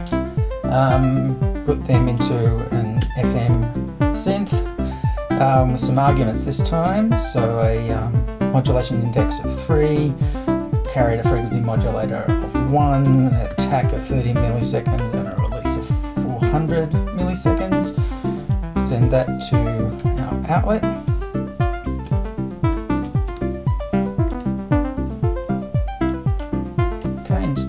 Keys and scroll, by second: 0.8 super+1, 2.2 f, 3.0 m, 3.4 shift+`, 6.0 space, 8.7 3, 9.8 space, 10.9 1, 13.1-16.5 typing, 17.8 super+Return, 19.2-23.8 typing.